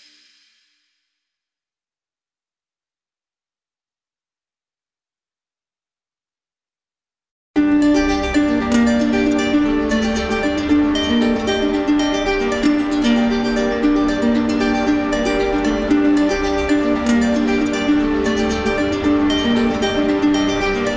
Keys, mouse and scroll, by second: 0.1 alt+click, 0.7 alt+click, 1.2 alt+click, 1.6 alt+click, 2.5 shift+click, 3.2 shift+click, 4.1 click, 6.0 alt+click, 6.4 alt+click, 7.1 shift+click, 7.7 shift+click, 8.1 shift+click, 9.0 middle click, 9.9 alt+right click, 13.5 right click, 14.4 right click, 14.9 right click, 15.6 right click, 16.8 click, 17.7 shift+click, 18.3 click, 18.7 click, 18.8 shift+click, 19.2 shift+click, 19.6 shift+click, 20.0 shift+click, 20.4 shift+click, 20.8 shift+click.